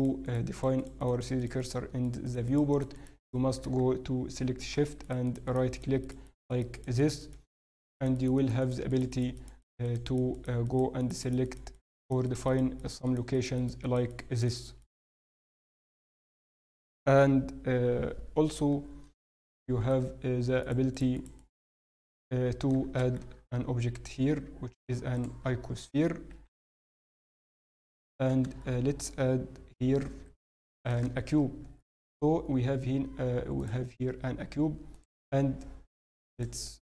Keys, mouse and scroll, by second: 18.8-19.5 scroll down 1, 19.5 shift+middle click, 19.5-20.6 scroll down 1, 20.6 shift+right click, 20.6 scroll down 1, 21.9 shift+right click, 23.2 shift+a, 25.9-26.6 scroll down 2, 26.3 s, 27.9 shift+middle click, 28.6 shift+a, 30.7 shift+right click, 31.2 shift+a, 34.9 click, 36.7 x.